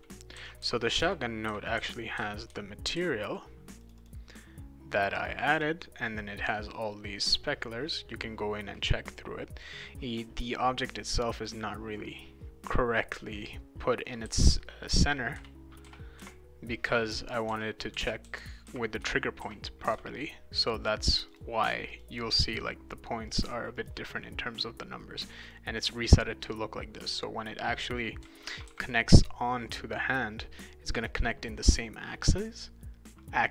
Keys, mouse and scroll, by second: 0.0-3.4 typing, 3.8 click, 4.0 click, 5.1 click, 11.4 click, 14.0-16.7 right drag, 14.2-19.9 typing, 17.8-20.3 right drag, 21.3 click, 21.9 click, 22.3 click, 23.3 click, 23.7 click, 25.4 click, 25.8 click, 27.5-29.2 right drag, 28.0-29.2 typing.